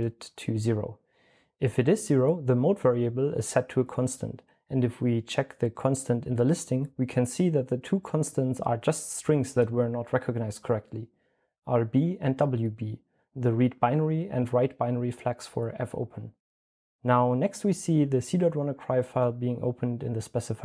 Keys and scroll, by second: 10.4-14.7 typing.